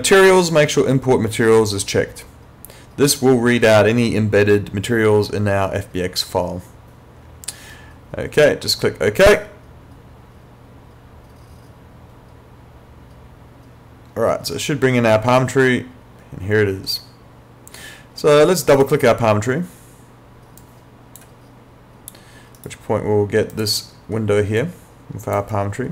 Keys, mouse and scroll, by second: 9.3 click, 18.7 click, 22.6 right click, 23.5 click, 25.5 right click.